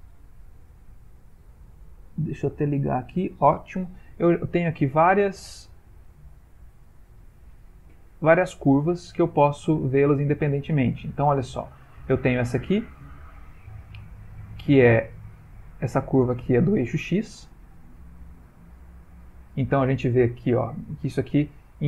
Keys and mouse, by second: 1.3 click, 3.9 middle click, 4.8 ctrl+middle click, 5.0 ctrl+middle click, 5.1 ctrl+middle click, 5.7 middle click, 6.2 ctrl+middle click, 7.5 ctrl+middle click, 7.8 click, 8.3 middle click, 8.9 ctrl+middle click, 9.6 middle click, 10.0 ctrl+middle click, 10.9 middle click, 12.0 click, 15.1 click, 15.1 middle click, 16.1 click, 16.9 click, 17.5 g, 20.1 ctrl+middle click, 21.7 g.